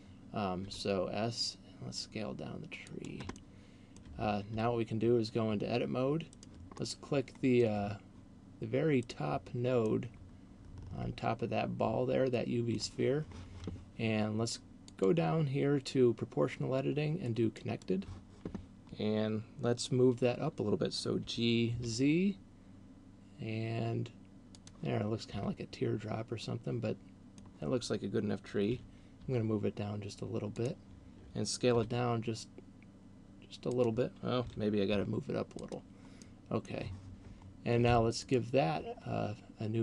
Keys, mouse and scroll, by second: 0.6 s, 3.1 click, 3.6 middle click, 4.6 Tab, 6.3 right click, 6.8 middle click, 8.6 right click, 9.8 middle click, 15.1 click, 21.3 g, 24.8 click, 25.3 Tab, 26.3 middle click, 28.8 g, 30.8 click, 31.8 s, 33.8 click, 34.6 g, 35.8 click, 36.1 middle click, 38.1 click.